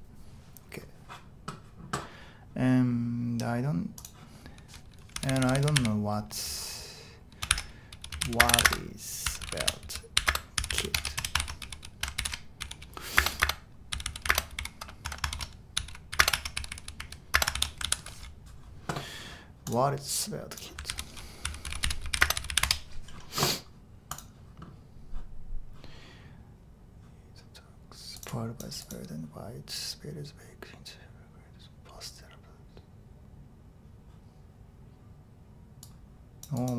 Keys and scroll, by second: 4.9-17.5 typing, 12.1 shift+super+l, 15.3 Escape, 17.6 Escape, 17.8 super+h, 20.9 super+t, 21.2-23.1 typing.